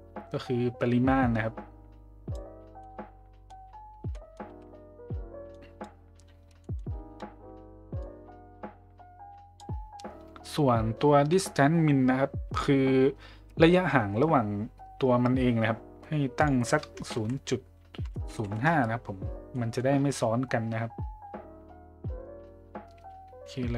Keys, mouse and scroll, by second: 2.8-3.4 middle drag, 4.1 middle drag, 5.6 click, 6.6 middle click, 8.0-9.6 drag, 16.4-18.9 drag, 19.5 middle drag.